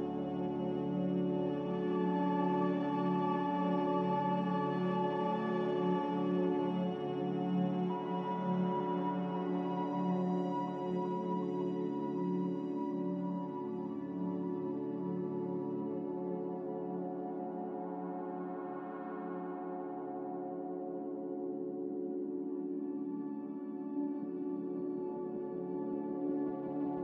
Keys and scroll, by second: 7.3-9.4 typing, 11.1-13.3 typing, 16.3 a, 21.2 m.